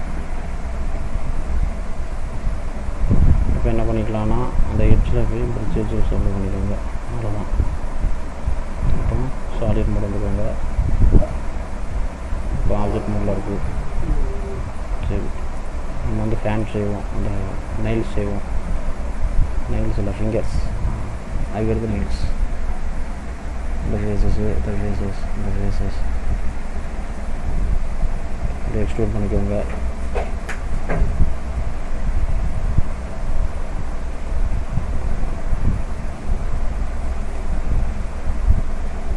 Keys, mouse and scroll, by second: 0.5 scroll down 1, 1.1 middle click, 2.3 scroll down 1, 5.0 click, 6.6 click, 7.1 middle click, 10.1 click, 11.4 click, 12.6-12.9 scroll down 2, 12.9 middle click, 13.7-14.2 scroll up 2, 14.2 middle click, 15.1 scroll up 1, 15.5 middle click, 16.3 middle click, 17.3 click, 18.6 click, 21.2 middle click, 21.9-22.3 scroll up 2, 23.2 shift+click, 26.9-28.6 shift+scroll down 3, 28.6-29.1 scroll down 1, 28.6 e, 31.9 middle click, 32.9-34.3 scroll down 3, 33.3 middle click, 34.3 e, 36.3 ctrl+z, 36.7 ctrl+z, 37.4 e.